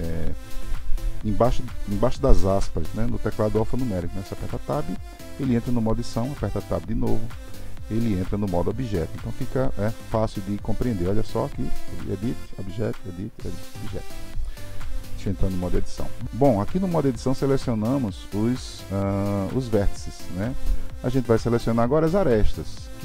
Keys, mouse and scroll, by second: 4.4 Tab, 6.1 Tab, 11.4 Tab, 12.2 Tab, 19.3 click, 20.4 click.